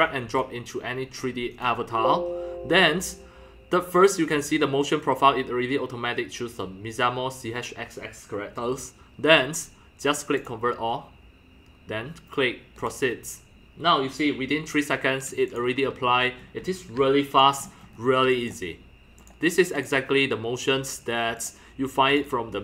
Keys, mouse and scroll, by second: 0.4-5.6 drag, 6.2 click, 10.5-12.1 drag, 12.8 click, 16.1-16.6 scroll, 16.3-18.2 typing, 16.6 click, 17.4 click, 17.6-18.0 scroll down 7, 18.8 click, 19.6 click, 20.0 click, 20.8 click, 21.0-22.4 drag, 22.4-22.6 drag.